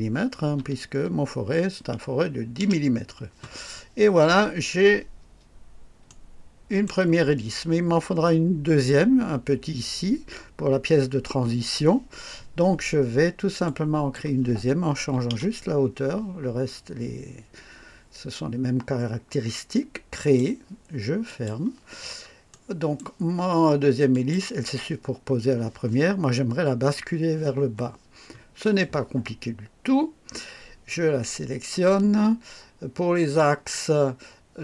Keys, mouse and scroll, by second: 0.5 KP_5, 2.6 Return, 4.3-4.7 scroll down 1, 6.0-7.0 right drag, 13.6 click, 14.9 KP_1, 15.3 KP_0, 20.1 click, 21.2 click, 21.9 scroll down 1, 22.4-23.1 right drag, 24.1 click, 33.3 click.